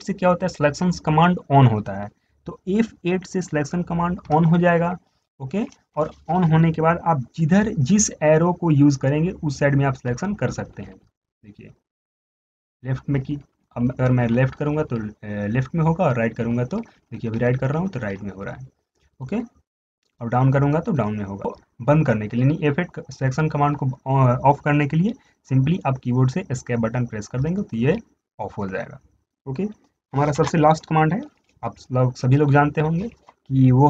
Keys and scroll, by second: 4.6 F8, 10.4 Left, 10.6 Left, 10.9 Left, 11.0 Left, 11.2 Left, 11.6 Left, 11.8 Left, 12.1 Left, 12.9 Right, 13.1 Right, 13.3 Right, 13.4 Right, 13.6 Right, 14.0 Right, 14.2 Right, 14.4 Right, 14.6 Right, 14.9 Right, 15.1 Right, 15.3 Right, 16.8 Right, 17.0 Right, 17.3 Right, 17.5 Right, 17.7 Right, 17.9 Right, 18.1 Right, 18.3 Right, 18.4 Right, 28.0 Escape.